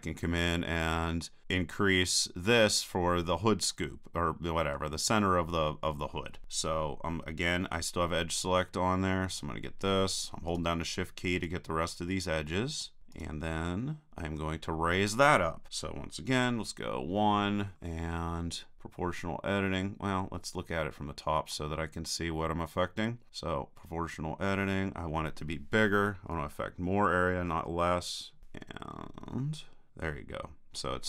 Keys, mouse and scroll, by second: 1.0-7.7 middle drag, 9.3-15.5 right drag, 16.4 KP_1, 17.4 click, 17.8 middle click, 18.0 middle click, 18.1 click, 20.2-23.3 middle drag, 23.3-24.8 drag.